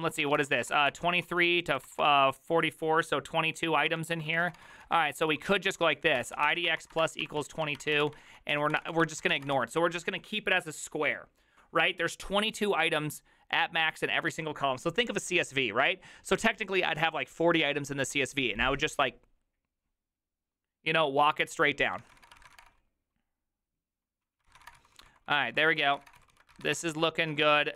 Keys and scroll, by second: 0.0-2.4 typing, 0.7 ctrl+c, 4.0 ctrl+^, 4.3-10.1 typing, 21.9-23.0 typing, 24.4-27.7 typing.